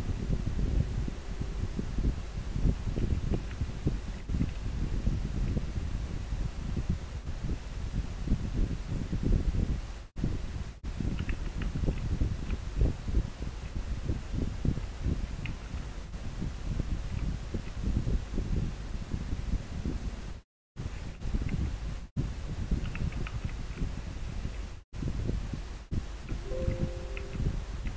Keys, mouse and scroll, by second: 4.3 scroll up 1, 12.0 scroll down 1, 16.8 scroll down 1, 23.5 scroll down 1.